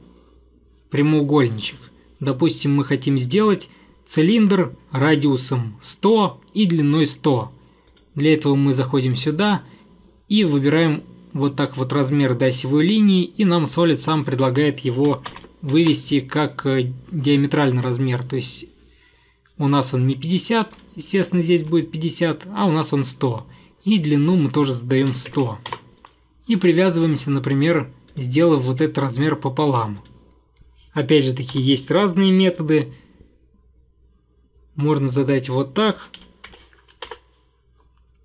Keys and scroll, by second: 15.0-15.9 typing, 16.0 Return, 21.7 Escape, 25.0-25.9 typing, 26.2 ctrl+я, 31.7 =, 36.3-36.6 typing, 37.2 Return.